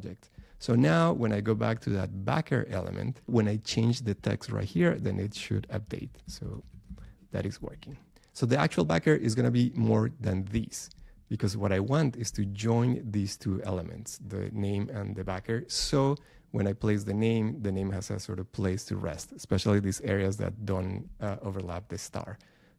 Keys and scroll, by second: 4.5 BackSpace.